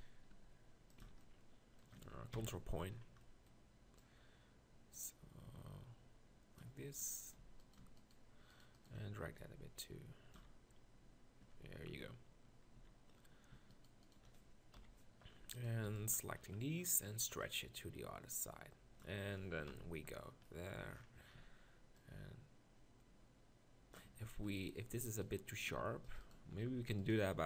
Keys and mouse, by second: 0.3 g, 1.0 z, 2.3 ctrl+KP_Decimal, 6.8 Tab, 7.4 z, 8.1 shift+right click, 10.4 z, 11.5 Tab, 11.9 Tab, 12.8 z, 14.7 KP_1, 15.8 b, 19.7 ctrl+KP_Decimal, 21.4 z, 24.1 Tab, 24.5 Tab, 25.8 ctrl+r.